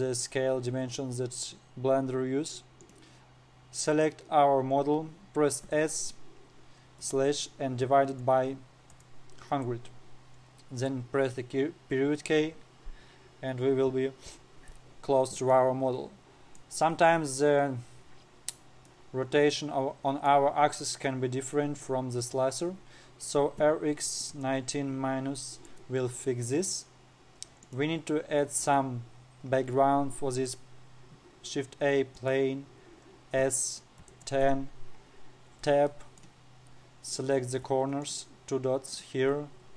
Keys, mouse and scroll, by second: 0.9-1.7 scroll up 2, 1.7-2.8 scroll down 4, 3.3 click, 6.2 s, 11.9 KP_Decimal, 13.6-15.2 scroll up 2, 16.1-19.1 middle drag, 19.4-23.9 middle drag, 23.9 r, 27.0 scroll up 3, 27.5-28.2 scroll down 2, 28.2 click, 29.2 shift+a, 33.9 s, 35.6-36.2 scroll up 5, 36.2 Tab, 36.4 middle click, 36.9-37.7 scroll up 2, 37.7 click, 38.6 shift+click, 39.4 shift+click.